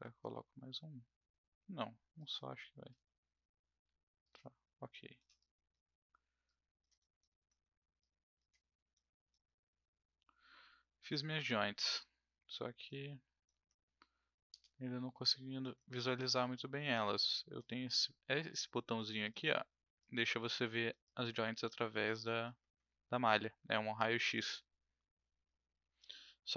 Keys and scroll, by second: 14.5 space.